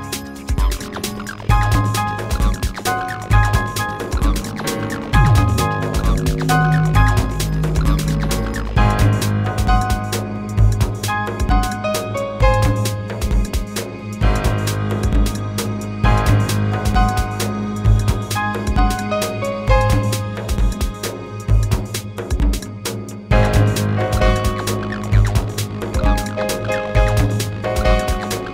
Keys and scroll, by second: 4.4 space, 12.7 space, 18.9 w.